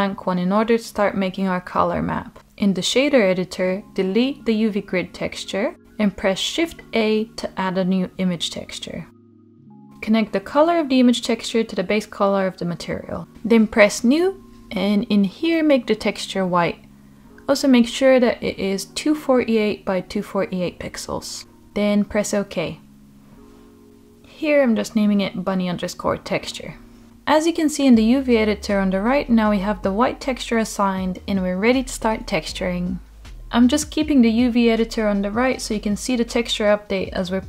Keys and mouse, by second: 1.7 Delete, 4.7 shift+a, 12.3-22.8 drag, 23.2-27.1 drag, 30.7 click, 31.6 click, 36.5-37.2 drag.